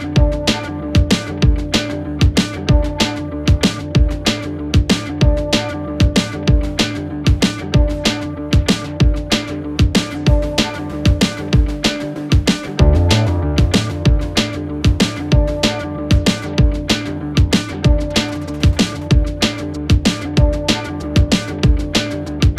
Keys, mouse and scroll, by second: 0.9-1.7 click, 12.8 click, 14.5 click, 21.1-22.5 typing.